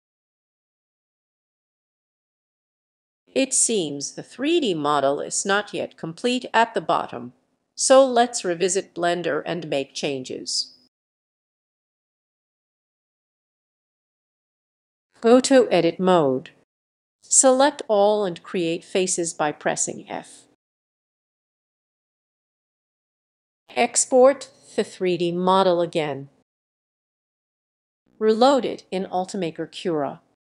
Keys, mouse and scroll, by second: 0.0-1.1 middle drag, 1.1 click, 1.3-3.0 typing, 4.2-5.3 drag, 5.3-7.2 right drag, 8.1 right click, 8.5-9.7 middle drag, 8.5-9.2 scroll, 11.0 right click, 14.9 click, 15.4 click, 16.6 Tab, 17.3 a, 18.6 f, 19.8 Tab, 22.5 click, 22.7 ctrl+s, 23.2 click, 27.4-30.5 drag.